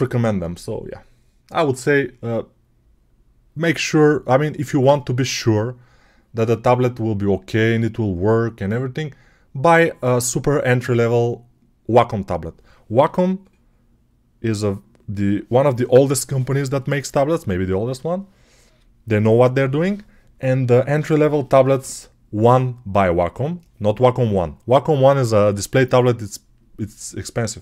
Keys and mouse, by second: 12.5-27.6 right drag.